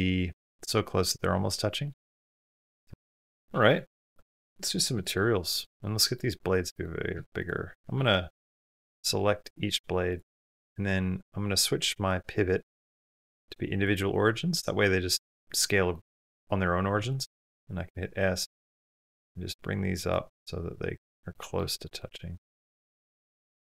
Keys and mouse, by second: 1.1 middle click, 1.1 typing, 2.3 middle click, 3.2 middle drag, 4.2-4.7 shift+middle drag, 4.9 shift+middle click, 5.6-6.0 middle drag, 7.2 shift+click, 8.4 click, 9.2 shift+click, 10.2 middle click, 12.7-13.7 drag, 14.1 middle click, 15.7 middle click, 18.7 s, 20.1-21.4 middle drag, 21.7 shift+middle click, 21.8-22.2 middle drag, 22.4 s, 23.2 shift+middle click.